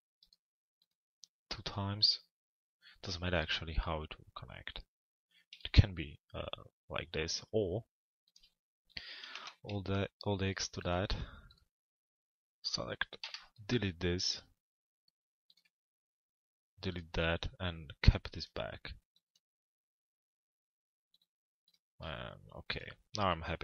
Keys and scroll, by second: 12.8 Delete, 15.6 BackSpace.